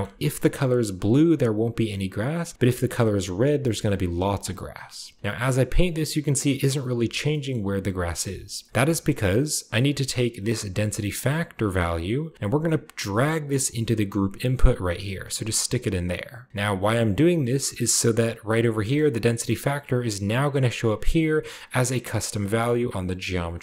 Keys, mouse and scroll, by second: 2.5-4.2 drag, 5.1-6.8 drag, 7.0-8.5 middle drag, 7.0-7.9 scroll down 2, 8.1-8.7 scroll down 1, 8.7-10.1 middle drag, 8.7-9.1 scroll up 1, 9.1-12.7 drag, 12.9-15.0 drag, 15.2 click, 17.1-18.1 drag, 21.1-22.7 drag.